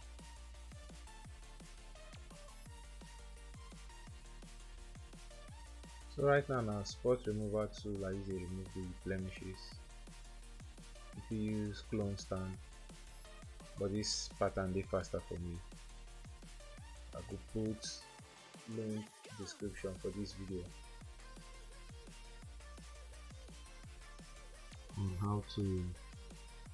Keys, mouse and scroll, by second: 0.2-1.2 typing, 2.0 double click, 5.5 double click, 8.5 double click, 10.9 double click, 17.1 double click, 19.1 ctrl+0, 21.4 ctrl+=, 21.6 ctrl+=, 22.3 s, 23.1 alt+click, 23.3 alt+click, 23.6 alt+click, 23.9 alt+click, 24.1 alt+click, 24.3 alt+click, 25.1 alt+click, 25.4 alt+click, 25.4 alt+click, 25.8 alt+click, 26.2 alt+click, 26.2 alt+click, 26.3 double click, 26.4 alt+click, 26.6 alt+click.